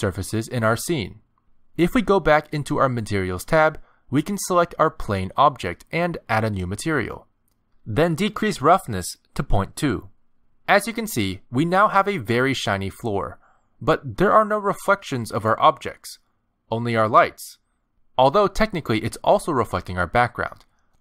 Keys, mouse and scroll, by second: 1.3 click, 4.0 click, 5.1 click, 6.9 click, 9.2-9.9 scroll down 8, 10.4 click, 12.9 middle click, 14.8 click, 18.4 middle click, 19.6 shift+middle click, 20.3 scroll down 2.